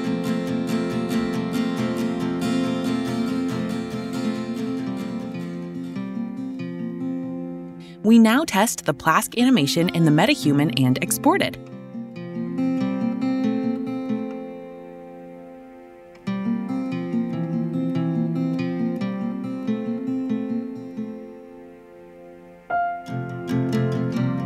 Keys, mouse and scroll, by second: 0.0-2.4 typing, 3.3-8.4 drag, 11.4-13.3 typing, 13.8 right click, 16.9 q, 18.1 right click, 19.5 click, 20.1 right click, 23.6 click.